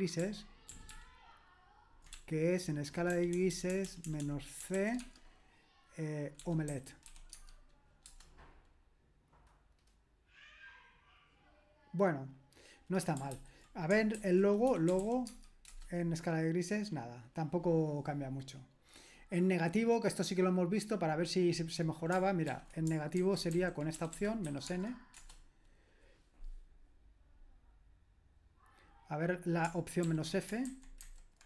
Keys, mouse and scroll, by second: 0.2 ctrl+p, 0.7 ctrl+p, 0.9 ctrl+p, 2.1-5.0 typing, 6.2-7.5 typing, 8.0 Return, 13.3 ctrl+p, 14.2 ctrl+w, 14.5-15.5 typing, 15.7 Return, 20.5-21.2 scroll down 1, 21.2-22.1 scroll down 1, 22.1-22.5 scroll down 1, 22.5 ctrl+p, 23.2 alt+b, 23.5 alt+b, 24.0 BackSpace, 24.2 BackSpace, 24.5 n, 24.7 space, 25.2 Return, 27.6-29.6 scroll down 1, 29.6-30.0 scroll down 1, 30.0 ctrl+p, 30.7 alt+b, 31.0 alt+b.